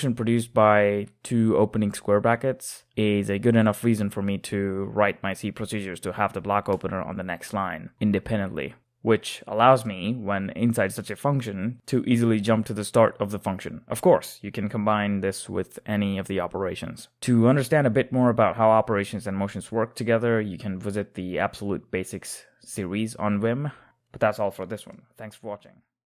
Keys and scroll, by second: 0.6-2.2 typing, 3.4-5.7 typing, 6.1 Return, 8.1-11.4 typing, 8.3 Escape, 14.2 typing, 15.4 j, 16.1 ctrl+o, 17.2-19.0 typing.